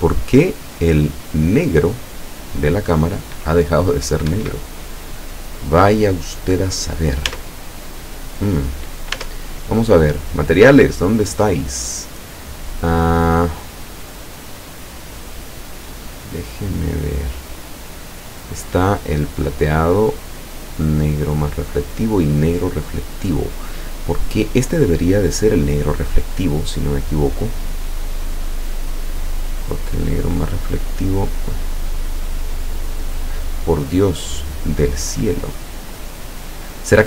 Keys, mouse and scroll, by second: 4.3 Escape, 5.0 right click, 7.3 Tab, 9.2 Tab, 10.4 click, 11.1-12.3 scroll up 1, 18.8 scroll down 1, 19.7 scroll up 1, 20.7-21.5 scroll down 1, 22.5 click, 27.7-28.0 scroll up 1, 28.4 click, 29.3 click, 32.7-33.5 scroll down 4, 33.7-34.7 scroll up 2, 35.9-36.3 scroll down 2, 36.7-37.0 scroll down 2.